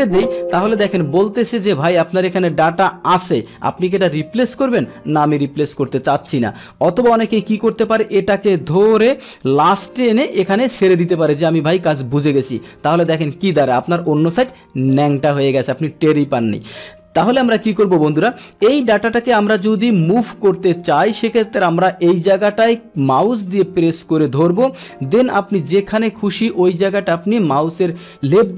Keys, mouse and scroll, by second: 5.3 click, 7.7-11.7 drag, 17.3 ctrl+z, 19.1 click, 23.4-28.5 drag.